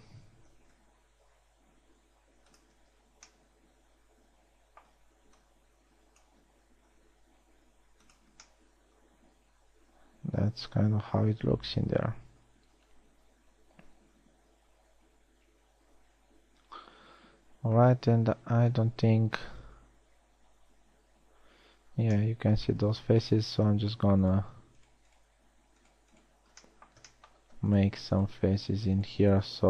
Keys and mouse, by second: 1.1 s, 3.4 z, 7.2 s, 15.8 middle click, 19.4 KP_1, 19.8 z, 23.3 z.